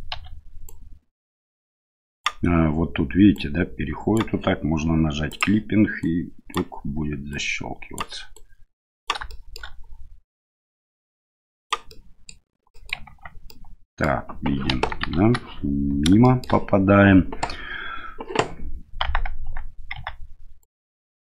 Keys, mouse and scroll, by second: 0.1 1, 0.6-2.2 right drag, 3.3 right click, 5.3 click, 6.0 right click, 7.3 right click, 8.3 right click, 9.3 shift+middle click, 10.5-11.7 right drag, 11.9 middle click, 12.8 middle click, 13.1 Tab, 13.5-14.0 middle drag, 14.7 KP_1, 15.1 KP_3, 16.2 shift+middle click, 19.9 Tab, 20.6-21.2 right drag.